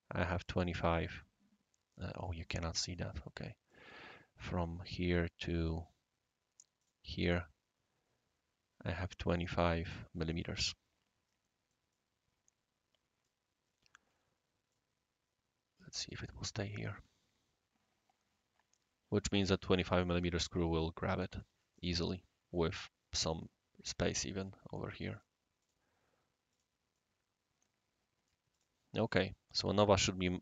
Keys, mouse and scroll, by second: 0.4 click, 2.2 click, 2.8 click, 3.7 drag, 4.6 click, 5.0 drag, 5.0-5.7 right drag, 6.8-7.3 drag, 11.4-11.9 middle drag, 11.9-13.3 right drag, 14.7-16.1 drag, 20.2-21.4 right drag, 21.7 click, 25.1 click, 25.6 click, 26.5 click, 26.9-28.3 right drag, 28.5 click, 29.0-30.0 right drag.